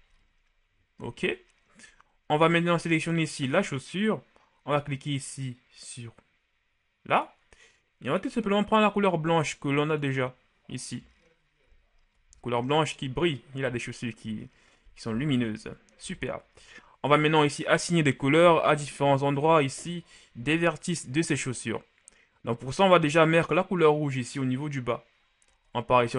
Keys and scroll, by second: 12.4 shift+a.